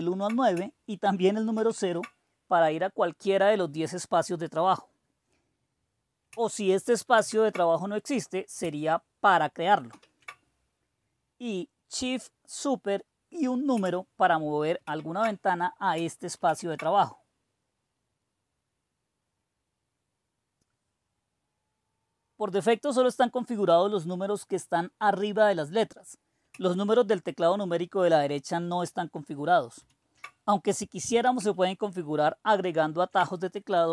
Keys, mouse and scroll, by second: 1.5 super+5, 7.1 super+3, 9.8 super+5, 14.8 shift+super+7, 16.4 super+6, 27.4 super+KP_4, 28.7 super+KP_5, 29.8 super+KP_6, 32.7 super+KP_7.